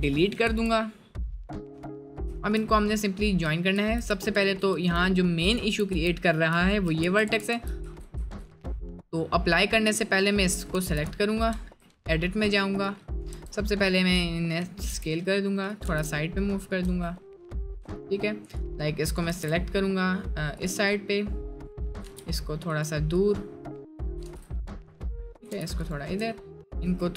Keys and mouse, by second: 0.5 Tab, 1.0 middle click, 2.7 middle click, 3.7 ctrl+z, 5.2 middle click, 6.8 middle click, 10.7 g, 11.6 Tab, 13.4 Tab, 14.9 s, 15.9 g, 16.9 Tab, 19.3 g, 22.0 g, 24.1 g, 25.4 g, 26.1 Tab, 26.8 s.